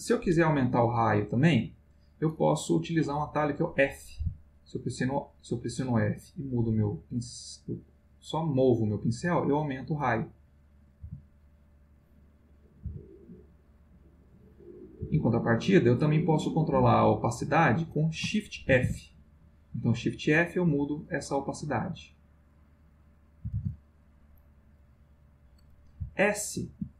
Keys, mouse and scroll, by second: 1.4 click, 4.2 f, 6.8 click, 10.0 click, 11.0 f, 11.6 click, 12.2 click, 12.8 f, 13.9 click, 14.3 click, 15.0 f, 15.5 click, 16.0 click, 18.7 shift+f, 22.0 click, 22.5 click, 23.5 shift+f, 24.4 click, 24.8 click, 26.0 s.